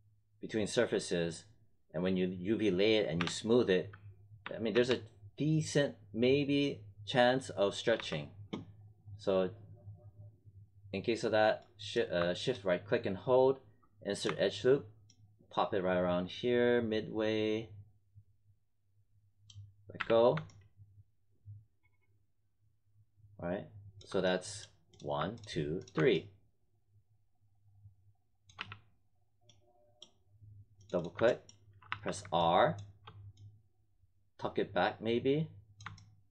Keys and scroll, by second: 3.1 3, 4.4 1, 4.7 3, 7.9 1, 19.9 w, 28.5 w, 31.8 r.